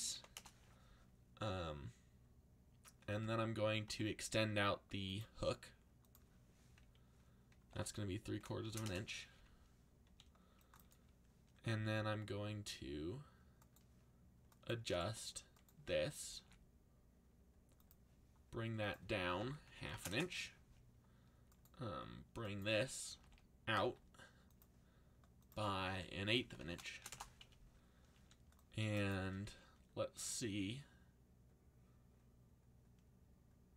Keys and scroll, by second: 0.0-0.6 typing, 2.8 e, 3.1 y, 3.9 x, 7.3-8.6 typing, 8.8 Return, 10.0 c, 11.7 r, 15.9-16.8 typing, 19.3-20.5 typing, 22.8-23.7 typing, 26.0-28.1 typing, 29.4 r.